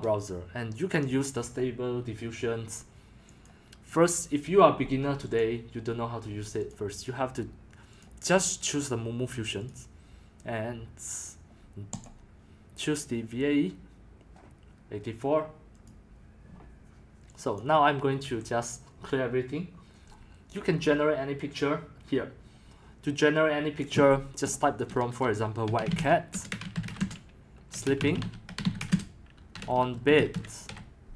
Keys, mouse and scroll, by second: 3.4 click, 3.9 click, 5.4 click, 7.0 click, 8.0 click, 9.7 click, 15.8 click, 17.6 click, 18.2 BackSpace, 24.5 click, 25.4-31.1 typing, 27.9 click.